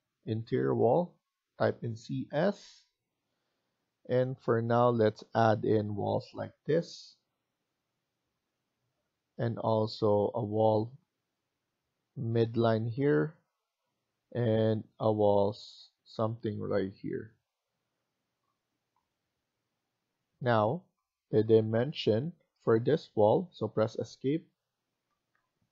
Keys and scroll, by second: 1.2-2.3 typing, 8.8 Escape, 17.1 Escape, 21.6 Escape, 22.2 Escape, 23.0 Escape, 24.6 Escape, 25.0 Escape, 25.2 Escape.